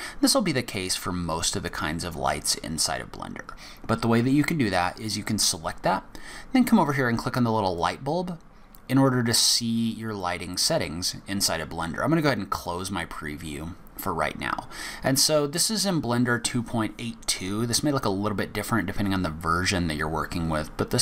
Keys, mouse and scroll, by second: 7.8 click, 12.5 click.